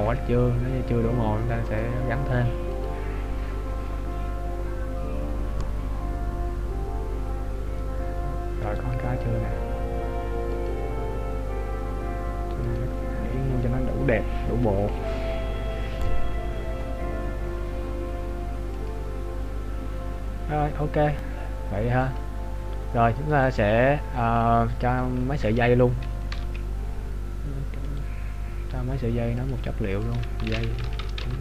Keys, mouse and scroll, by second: 1.8 click, 9.3 right click, 11.1 click, 22.8 click, 26.6 ctrl+alt+b, 28.0 right click, 29.4 click.